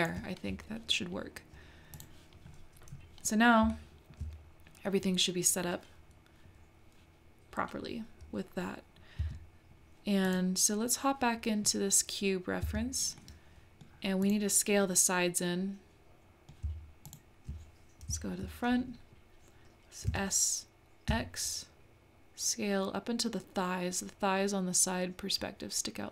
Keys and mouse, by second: 1.9 click, 3.7 shift+middle click, 9.2 Tab, 10.2 click, 12.6 Tab, 13.2 middle click, 14.3 click, 14.8-16.6 middle drag, 17.0 shift+click, 20.1 s.